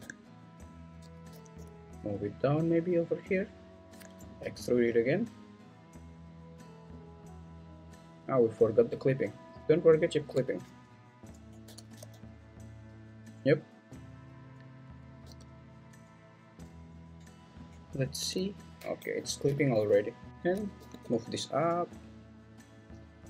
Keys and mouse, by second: 0.0 Return, 1.3 g, 1.5 y, 4.4 e, 11.6 g, 12.0 x, 15.2 g, 18.2 g, 19.5 Escape, 20.3 Escape, 20.3 g, 20.8 g, 21.0 y.